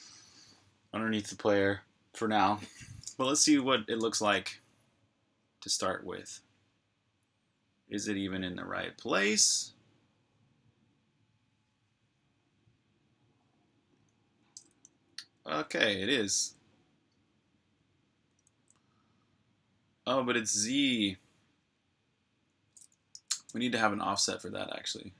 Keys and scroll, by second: 3.7-5.4 typing, 14.5-16.7 typing, 17.9-18.6 typing, 22.9 super+q.